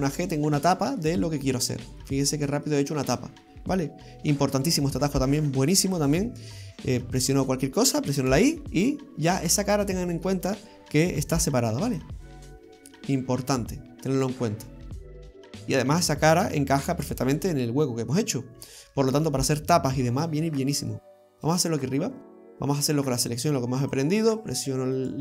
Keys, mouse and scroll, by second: 0.6 middle click, 1.3-1.6 scroll up 2, 1.6-2.0 scroll down 2, 2.0 middle click, 3.5 scroll down 2, 7.2 right click, 8.4 y, 9.5 right click, 10.2 middle click, 11.4 g, 12.3 middle click, 19.9-20.5 scroll up 2, 20.5 middle click, 21.5 right click, 23.9 click, 25.0 right click.